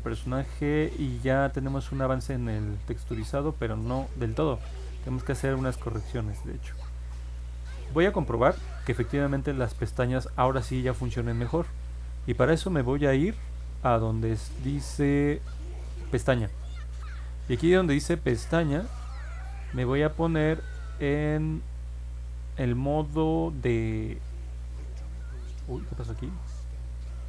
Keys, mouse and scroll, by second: 1.0 middle click, 1.7 middle click, 5.4-7.0 alt+drag, 12.2 scroll down 2, 13.3 middle click, 13.3-14.2 scroll down 3, 13.7 middle click, 14.1 middle click, 16.0 click.